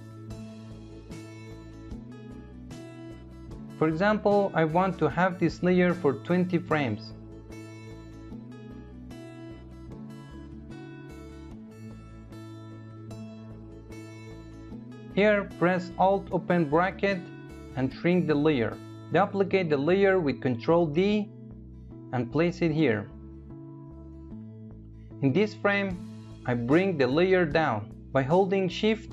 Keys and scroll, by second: 14.9 alt+], 19.0 ctrl+d.